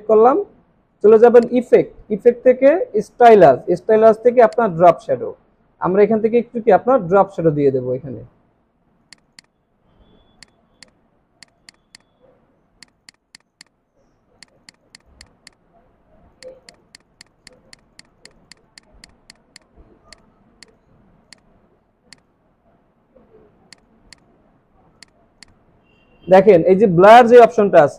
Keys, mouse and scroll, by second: 9.2 double click, 24.1 double click.